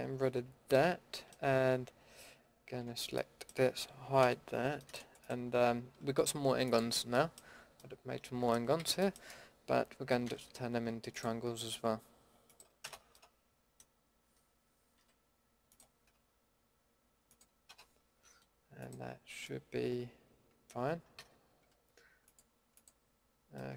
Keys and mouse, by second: 0.2 ctrl+x, 2.8 l, 4.2 h, 8.2 middle drag, 8.8 a, 10.2 k, 13.1 click, 14.9 k, 19.6 middle click, 20.0 middle click, 20.5 middle drag, 21.2 a, 23.6-23.7 drag.